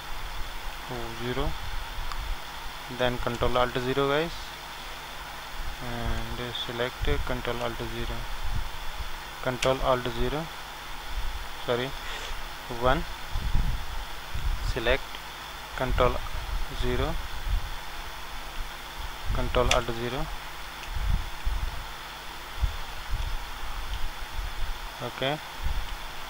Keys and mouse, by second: 0.7 KP_1, 6.3-8.0 drag, 7.6 ctrl+alt+KP_0, 12.2 KP_1, 16.6 ctrl+KP_0, 18.5 KP_1, 23.2 z.